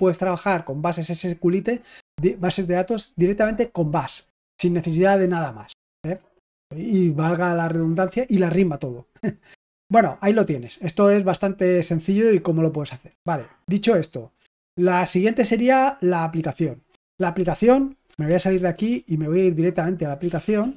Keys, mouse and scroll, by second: 14.1-15.7 scroll down 1, 15.7-16.3 scroll up 1, 16.3-18.0 scroll up 1, 18.0-18.5 scroll up 1, 18.3-20.7 typing.